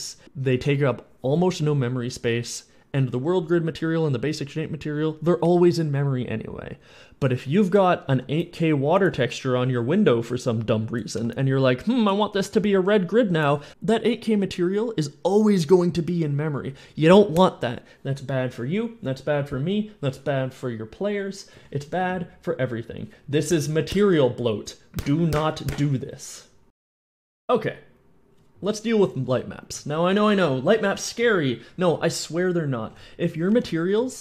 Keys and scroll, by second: 11.0 s, 12.3 w, 29.5-34.2 typing.